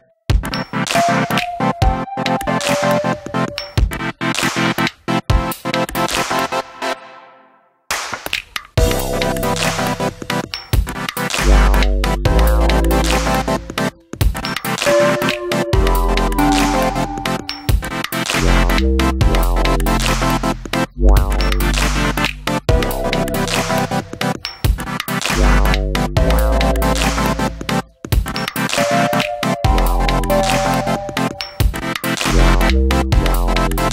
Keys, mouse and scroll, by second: 2.8-4.9 drag, 5.5-6.9 drag, 7.6 click, 9.4 click, 11.7 click, 12.4 click, 12.8 click, 13.6 click, 14.5 click, 15.6 drag, 16.9 shift+a, 21.6-23.6 drag, 24.7 shift+a, 29.8-31.3 drag.